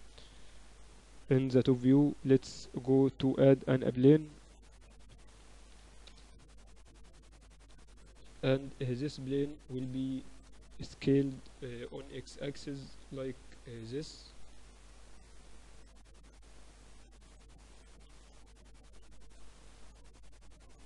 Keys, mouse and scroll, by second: 1.4 KP_7, 1.5 z, 2.3 shift+a, 5.0 r, 8.1 s, 12.3-14.0 drag, 18.1 KP_1, 19.0-20.8 scroll up 1.